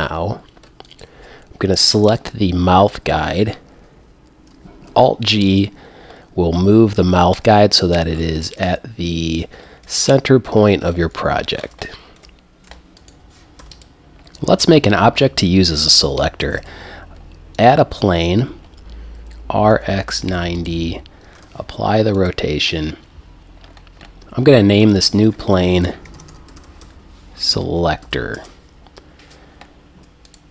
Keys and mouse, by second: 0.9 click, 1.9 g, 4.9 alt+g, 5.5 click, 11.2 KP_1, 11.9 middle click, 12.9 ctrl+a, 13.6 x, 16.6 shift+a, 19.2 r, 20.7 click, 21.4 ctrl+a, 22.4-22.7 drag, 24.6-26.9 drag, 30.3-30.5 right drag.